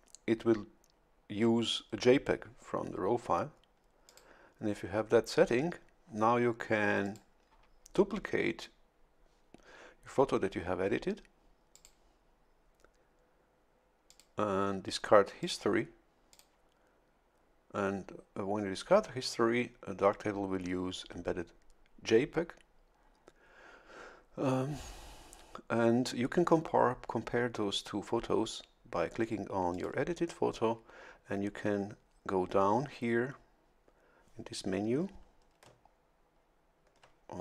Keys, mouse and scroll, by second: 4.1-7.3 drag, 11.7 click, 14.1 click, 15.4 click, 16.3 click, 29.7 click.